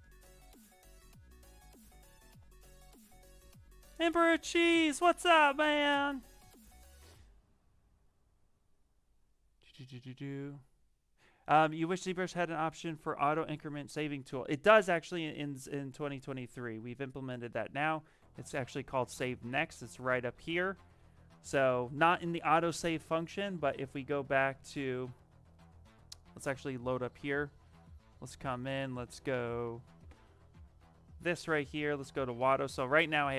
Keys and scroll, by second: 23.5 alt+Tab, 23.7 alt+Tab, 23.9 alt+Tab, 24.1 alt+Tab, 24.6 alt+Tab.